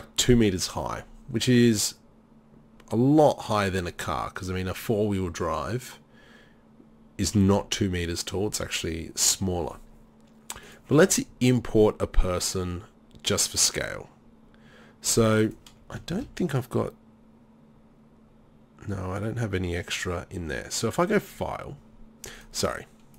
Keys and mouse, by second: 10.7-15.6 drag, 16.1 shift+a, 22.7 click.